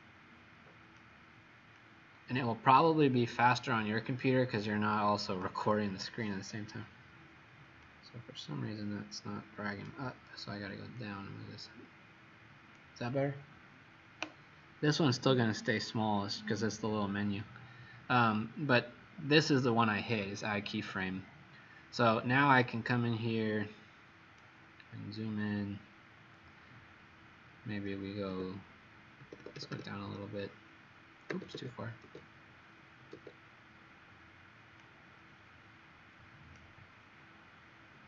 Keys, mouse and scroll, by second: 1.7 click, 7.8 click, 24.9-25.4 scroll up 1, 28.3-29.6 typing, 31.2 e, 31.5 e, 32.0 e, 33.1 e, 34.7 click, 37.2-37.8 w.